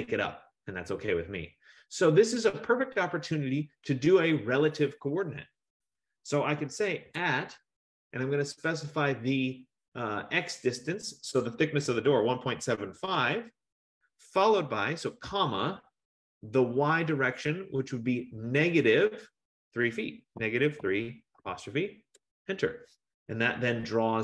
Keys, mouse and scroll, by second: 7.1 typing, 11.7-13.8 typing, 15.0-15.8 typing, 20.6-21.5 typing, 22.2 Return.